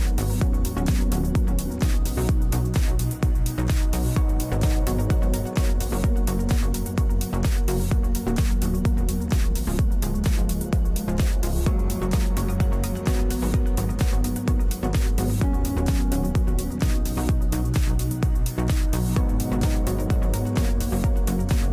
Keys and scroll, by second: 3.0 4, 3.3 5, 5.7 7, 16.7 space, 17.6 space.